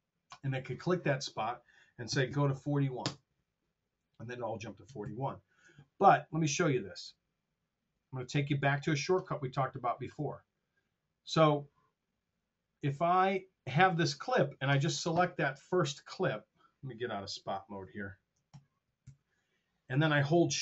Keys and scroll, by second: 2.1 KP_4, 3.3 Return, 5.0 super+z, 18.4 super+., 18.9 alt+2.